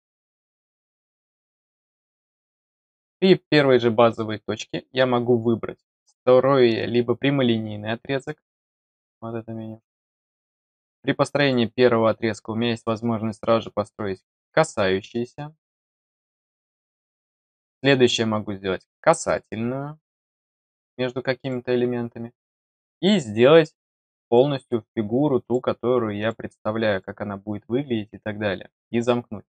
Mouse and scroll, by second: 1.8 click, 2.7 click, 8.2 click, 11.4 click, 15.8 click, 16.3 click, 19.2 click, 20.4 click, 21.4 click, 24.2 click, 25.4 click, 26.1 click, 26.9 click, 29.1 scroll down 1.